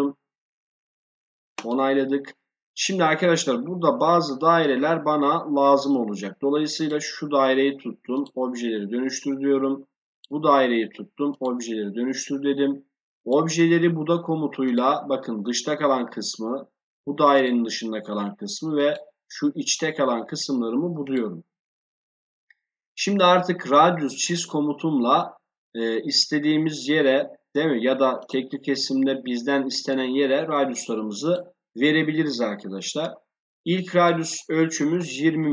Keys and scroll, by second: 34.7 2, 34.9 0.